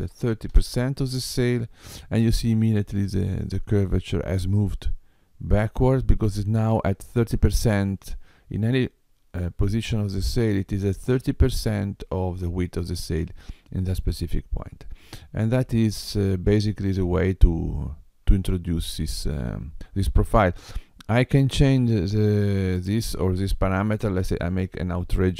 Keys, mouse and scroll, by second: 24.2 click.